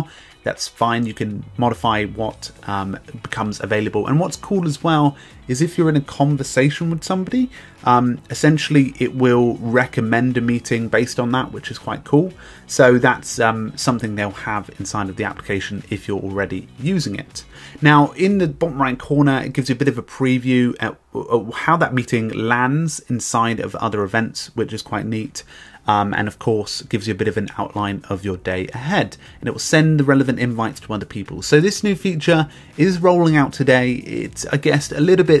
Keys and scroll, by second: 34.8 b.